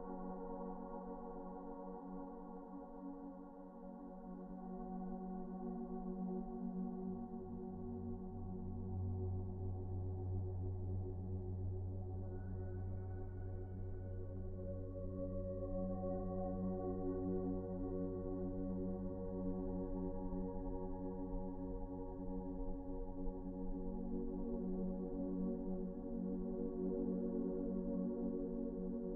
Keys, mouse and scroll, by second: 0.7 ctrl+z, 0.7 ctrl+z, 15.7 Delete, 16.6 ctrl+z.